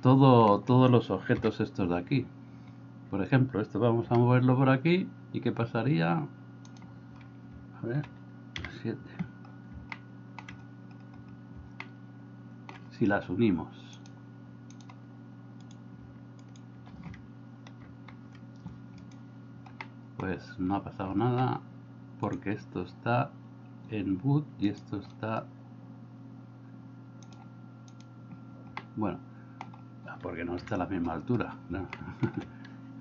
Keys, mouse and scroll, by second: 1.5 KP_7, 4.0 g, 8.6 KP_7, 10.0 shift+middle click, 11.8 middle click, 14.0 click, 17.9 ctrl+j, 19.9 middle click, 28.9-29.7 middle drag, 30.6 KP_1, 32.0 middle click.